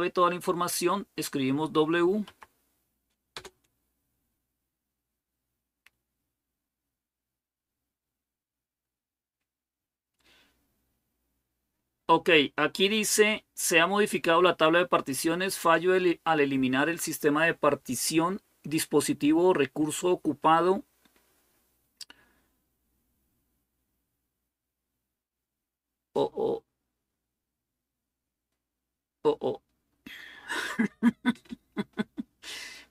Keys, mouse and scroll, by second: 2.0 typing, 3.1 Return, 3.2 typing.